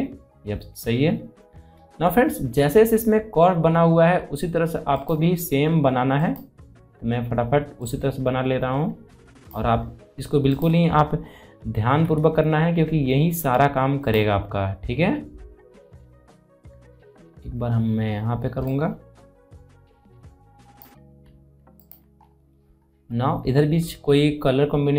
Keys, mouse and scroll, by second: 0.2 scroll down 1, 4.7-10.3 drag, 11.1 scroll down 1, 11.7 alt+scroll up 1, 13.8 click, 14.2 scroll down 1, 18.8-20.6 drag, 22.0 scroll down 1, 22.7 alt+scroll down 1, 23.5-24.9 scroll down 2.